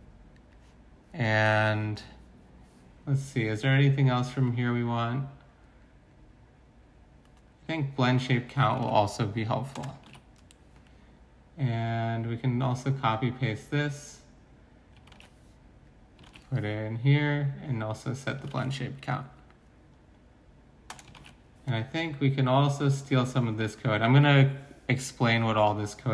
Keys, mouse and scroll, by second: 0.0 Return, 0.0 BackSpace, 1.4 BackSpace, 8.8 ctrl+c, 9.7 Return, 10.0 ctrl+v, 15.2 ctrl+c, 16.2 ctrl+v, 18.5 ctrl+c, 20.9 Return, 21.1 ctrl+v.